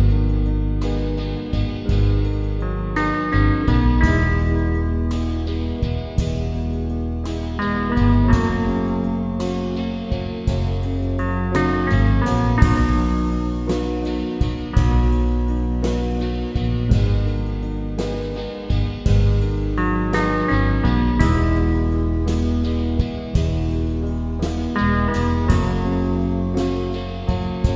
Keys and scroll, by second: 0.1 Return.